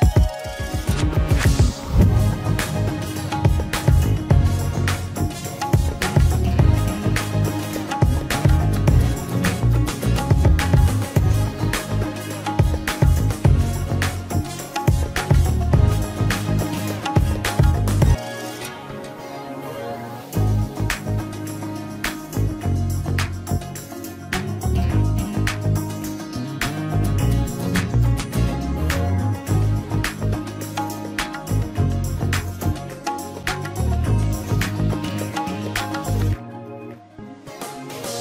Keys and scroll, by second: 9.5 ctrl+alt+z, 18.2 ctrl+space, 36.3 ctrl+space, 37.6 ctrl+space.